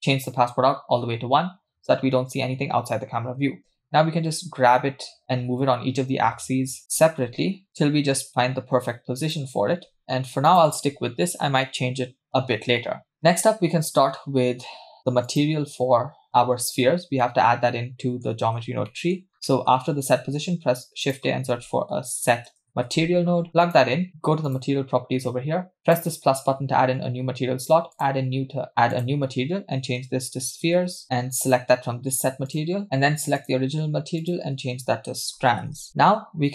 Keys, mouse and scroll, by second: 3.3 g, 7.2 g, 9.9 r, 10.0 g, 14.2-14.8 scroll down 4, 14.8-15.3 scroll up 3, 15.3 click, 16.8-17.2 scroll down 2, 17.2-18.2 middle drag, 18.5-18.9 scroll down 2, 18.9 middle click, 19.3-20.2 scroll up 4, 19.5 middle click, 20.2 shift+a, 24.5 click, 25.3-25.8 scroll up 2, 25.8-26.6 drag, 27.9-28.7 drag, 28.9-31.0 drag, 31.5-32.8 drag, 33.4 click, 34.2-35.9 drag.